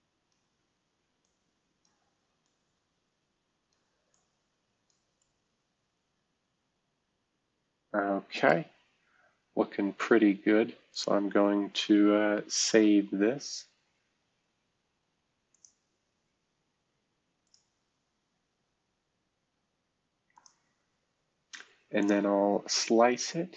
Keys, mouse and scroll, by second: 5.2-10.9 right drag, 8.8-10.7 scroll down 1, 10.7 scroll down 1, 10.9 click, 15.5-16.9 drag, 17.4 click, 20.3 click, 22.0-23.5 drag.